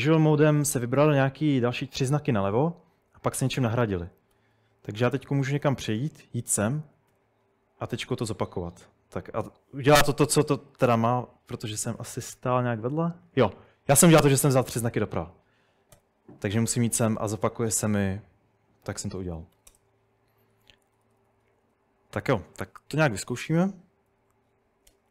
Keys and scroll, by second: 4.4-7.1 typing, 10.9-13.6 typing, 16.0 ., 19.2-25.1 typing.